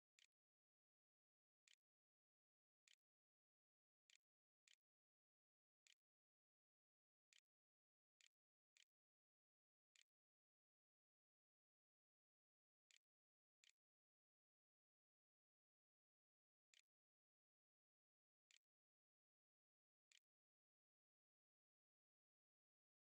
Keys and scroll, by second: 0.0-4.5 typing, 5.7 Tab, 6.0-10.0 typing, 11.0-16.5 typing, 13.2 Return, 18.3 b, 19.9 Tab.